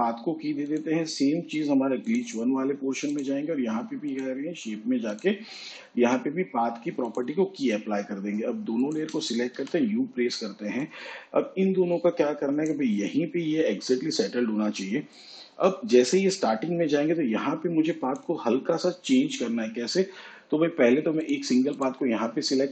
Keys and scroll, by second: 10.9 u.